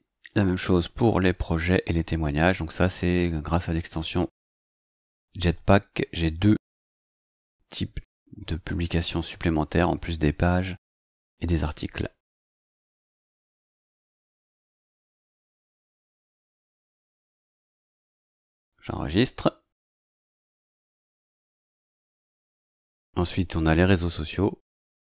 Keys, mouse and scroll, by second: 0.2-1.1 scroll down 2, 1.7-2.7 scroll down 2, 2.7-3.5 scroll up 4, 5.8 scroll down 1, 7.0 click, 7.6 BackSpace, 9.9 BackSpace, 10.4-12.0 scroll down 4, 12.5-12.8 scroll down 1, 12.8-13.7 scroll up 1, 13.7 click, 13.9 BackSpace, 16.5 click, 16.7 BackSpace, 17.6-18.5 scroll down 1, 18.5 click, 18.8-21.3 scroll down 1, 21.3-22.0 scroll down 1, 23.9 click.